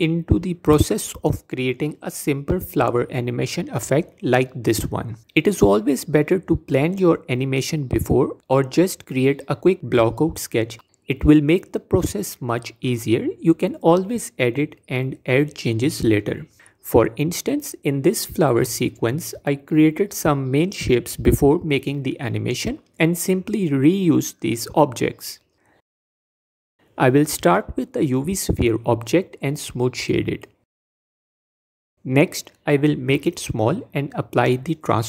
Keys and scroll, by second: 28.2 shift+a, 33.5 s.